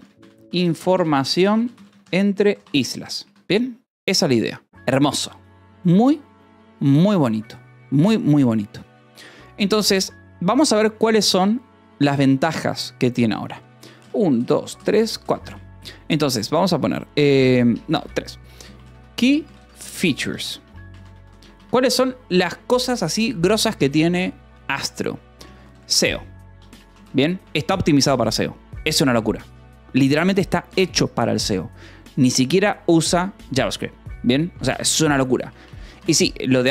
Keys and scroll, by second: 0.0-3.8 typing, 11.1 Return, 14.5 3, 15.4 space, 17.7-22.3 typing, 21.5 Escape, 21.9 Return, 23.5 -, 23.7 space, 25.7 o, 26.5 BackSpace, 27.3 Escape, 34.8 space, 35.6 BackSpace, 35.7 :, 35.9 space.